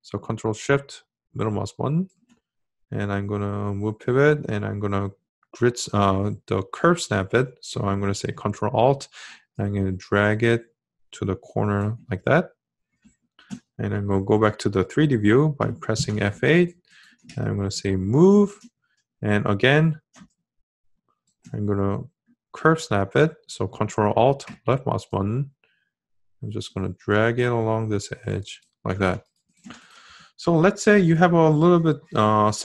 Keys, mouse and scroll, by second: 7.7-13.3 ctrl+alt+drag, 14.9 F8, 23.3-28.9 ctrl+alt+drag.